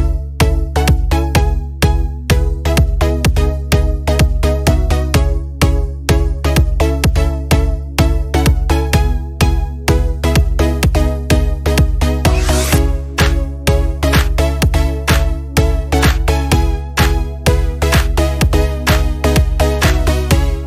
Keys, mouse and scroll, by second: 7.3 scroll up 1, 8.3 click, 10.7 click, 16.4 click.